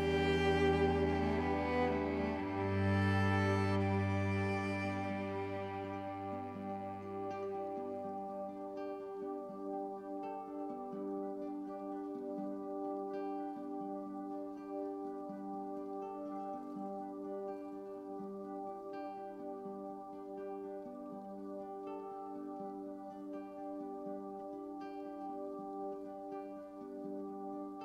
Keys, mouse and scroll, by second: 2.5 ctrl+s, 5.0 click, 7.8 click, 11.0-12.1 drag, 13.1 click, 16.7-21.8 drag, 16.7 typing, 22.5 typing, 23.1 click, 23.6-27.1 drag.